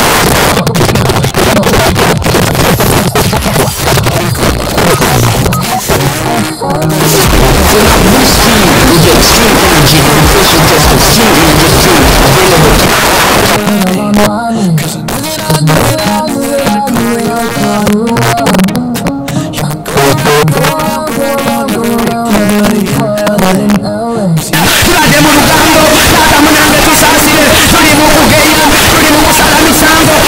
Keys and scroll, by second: 12.9 Page_Down.